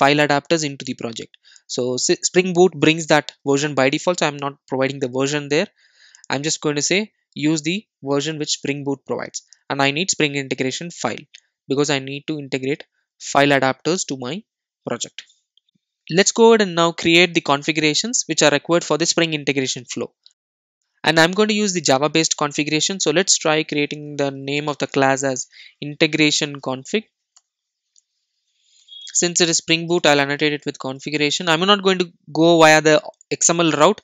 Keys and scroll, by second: 18.6 super+n, 33.7 Return.